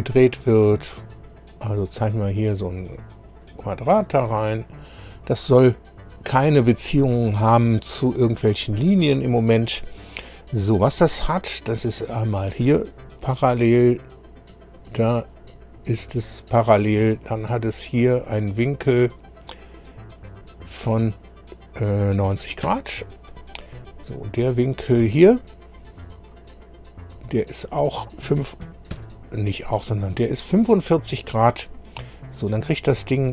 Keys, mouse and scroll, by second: 1.4 click, 2.3 click, 3.3 click, 4.8 click, 5.5 right click, 7.1-7.5 scroll up 1, 9.0 scroll up 1, 9.6 right click, 11.0 click, 12.1 click, 13.3 p, 14.6 click, 15.3 click, 16.1 p, 17.3 click, 17.8 click, 20.3 click, 22.3 KP_9, 22.4 KP_0, 22.7 KP_Enter, 24.7 click, 25.7 click, 27.0 click, 28.4 KP_4, 28.7 KP_5, 28.9 Return, 33.0 click.